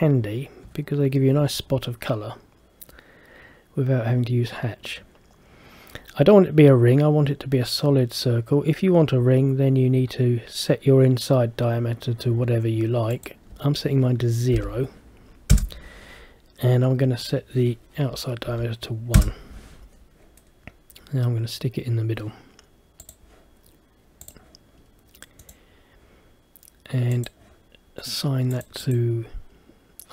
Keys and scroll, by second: 15.6 Return, 19.3 Return.